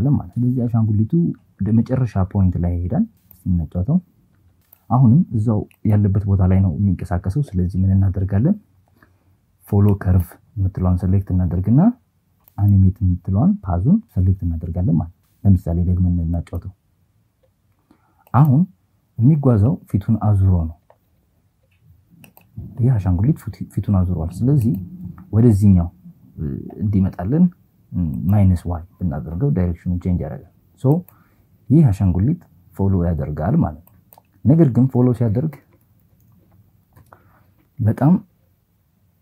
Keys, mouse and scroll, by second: 3.2 click, 4.6 click, 5.0 click, 9.4 click, 12.6 click, 16.5 click, 17.3 click, 20.6 click, 23.1 click, 26.9 click, 29.6 click, 32.6 click, 33.9-35.4 typing, 36.2 KP_Add, 36.4 KP_Add.